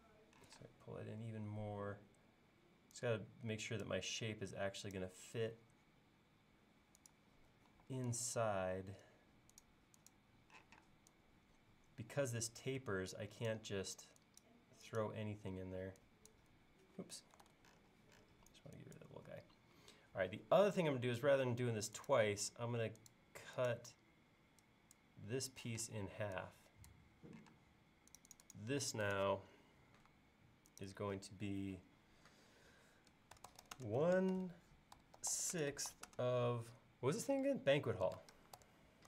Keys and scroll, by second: 0.5 p, 4.2 l, 7.4 l, 7.7 e, 10.6 p, 13.9 e, 17.5 super+z, 19.8 l, 25.7 p, 27.5 space, 33.1-35.8 typing, 38.1 typing.